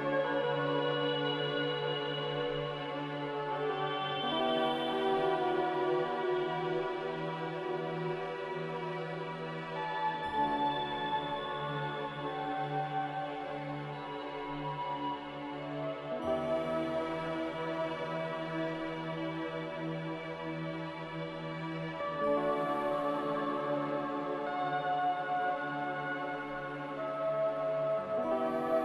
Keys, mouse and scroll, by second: 2.3 z, 4.3 2, 4.5 Return, 9.9 z, 11.3-15.8 typing, 17.1-17.8 typing, 25.8 a, 27.8 5, 28.4 1.